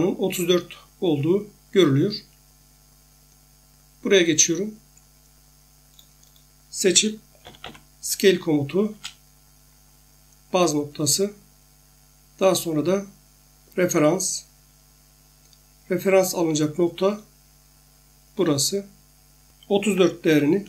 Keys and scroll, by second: 7.2-8.1 typing, 8.9 Return, 19.9-20.3 typing.